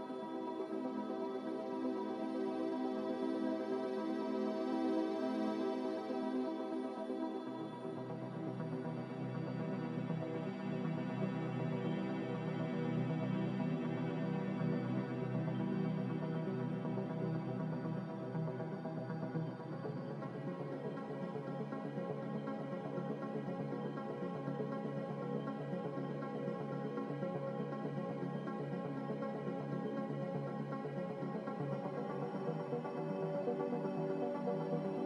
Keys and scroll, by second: 1.8 2, 4.9-5.8 typing, 7.9 0, 22.1-23.1 typing, 32.0 5.